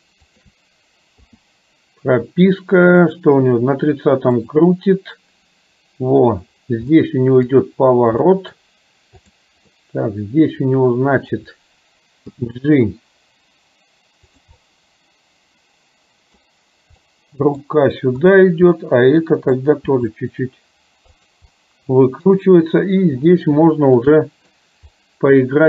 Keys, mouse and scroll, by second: 0.4 shift+click, 1.3 i, 3.2 click, 4.5 click, 6.9-7.5 middle drag, 8.4 middle click, 9.2 click, 9.8-11.3 middle drag, 12.4 g, 14.7-16.5 middle drag, 14.7-15.4 scroll up 1, 17.0-17.8 middle drag, 17.0-17.7 scroll up 1, 18.3 click, 18.9-19.5 middle drag, 20.0 g, 21.5 middle click, 23.8 shift+middle click, 24.2 middle click.